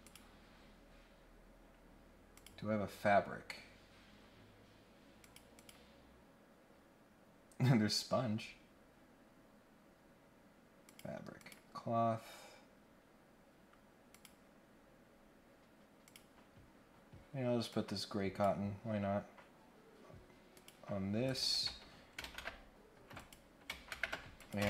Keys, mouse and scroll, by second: 0.0 click, 0.6 scroll down 4, 2.3 click, 4.4 scroll down 1, 5.2 click, 5.6 click, 6.9-7.2 scroll down 1, 7.3-7.8 scroll up 1, 7.8-8.4 scroll down 3, 8.6 scroll up 1, 9.2 scroll up 1, 9.3-9.7 scroll down 1, 10.8 click, 11.4 click, 12.0-12.4 scroll down 1, 12.4-12.9 scroll up 1, 14.1 click, 14.6 scroll down 1, 15.0 scroll up 1, 16.0 click, 16.8 scroll down 1, 17.7 click, 20.5 click, 21.2 click, 23.1 click, 24.4 click.